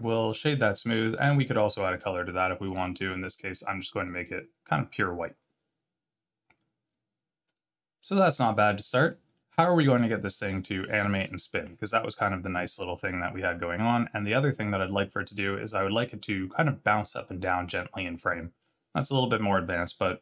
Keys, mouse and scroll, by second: 1.2 click, 1.9 click, 2.7 click, 7.4 click, 8.9 click, 11.1 click.